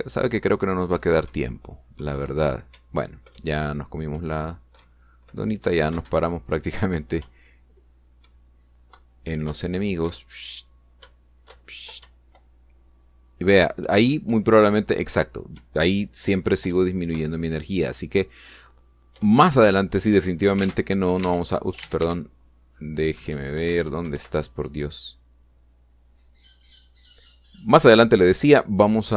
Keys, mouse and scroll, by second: 3.0 Left, 3.7 Up, 5.1 Left, 5.8 Right, 8.2 Up, 9.2 Left, 10.5 Up, 11.0 Left, 12.0 Up, 12.5 Left, 13.0 Up, 14.8 Up, 16.6 Down, 17.7 Right, 18.1 Left, 20.2 Up, 21.2 Escape, 21.8 alt+Tab, 22.4 alt+Tab, 23.0 alt+Tab, 24.2 alt+Down, 24.2 alt+Left.